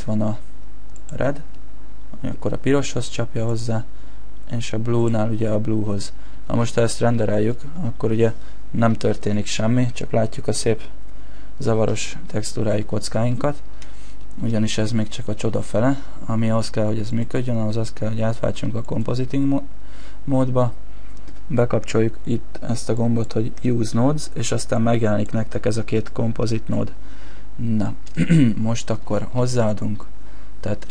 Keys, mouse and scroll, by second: 1.5 middle click, 3.5 click, 5.4 middle click, 6.5 shift+middle click, 13.3 Escape, 14.2 shift+middle click, 14.7 middle click, 15.3 shift+middle click, 17.1 click.